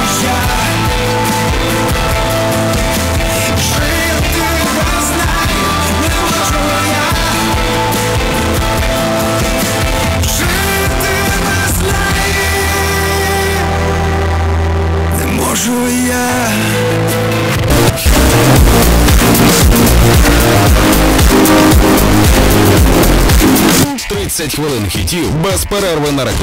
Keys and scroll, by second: 5.2 space, 24.3 Page_Down.